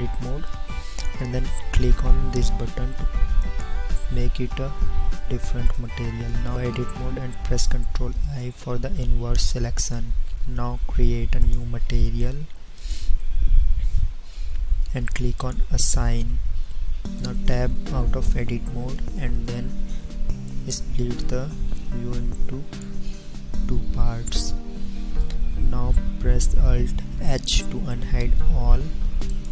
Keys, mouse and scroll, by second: 6.5 Tab, 8.2 ctrl+i, 17.6 Tab, 27.4 alt+h.